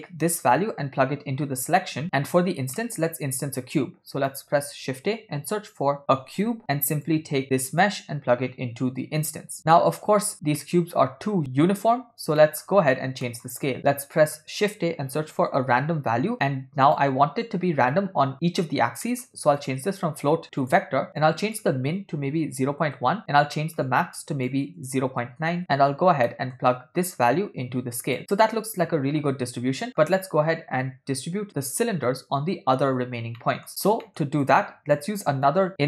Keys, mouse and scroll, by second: 0.6-1.8 drag, 2.1 middle click, 2.9 middle click, 3.4 shift+a, 7.9-9.5 drag, 9.8-11.4 middle drag, 12.4 middle click, 13.3 middle click, 13.6 shift+a, 19.1 middle click, 19.6-20.8 drag, 21.2-22.9 shift+drag, 23.6 middle click, 24.2-25.6 shift+drag, 26.3 middle click, 27.3 click, 28.3-30.1 middle drag, 33.4 ctrl+middle click, 34.1 middle click, 34.5 click, 35.5 click.